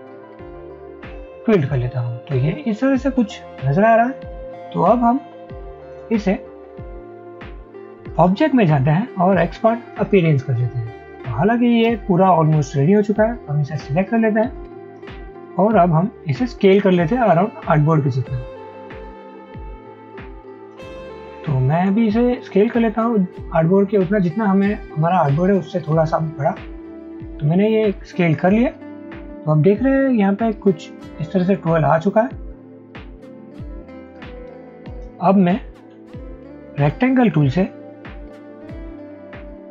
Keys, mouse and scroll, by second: 22.0 alt+shift+click, 36.9 m.